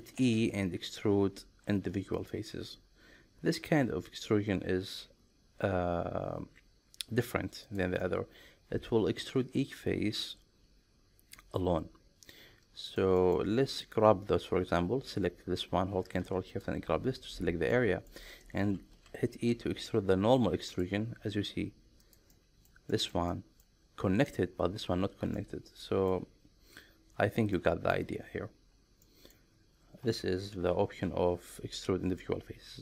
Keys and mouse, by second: 0.2 alt+e, 7.7 click, 8.0-12.3 middle drag, 12.9 shift+middle click, 13.2 middle click, 13.9 click, 17.7 middle click, 19.0 alt+e, 22.0 click, 22.3 middle click, 22.9 shift+middle click, 23.3 middle click, 25.4 middle click, 27.5 middle click, 29.0 middle click, 30.5 alt+e.